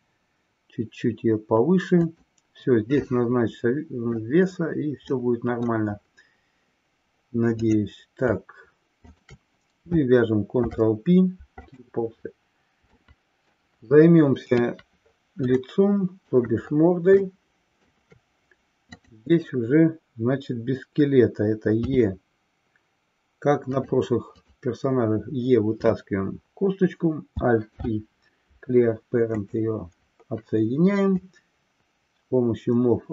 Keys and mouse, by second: 3.1-4.3 middle drag, 5.2-5.8 middle drag, 7.6 click, 10.4 ctrl+p, 13.0 middle click, 14.4 KP_3, 15.6 shift+middle click, 17.3 shift+middle click, 19.0 click, 23.8 click, 24.4 click, 27.6 alt+p, 31.1-33.1 drag.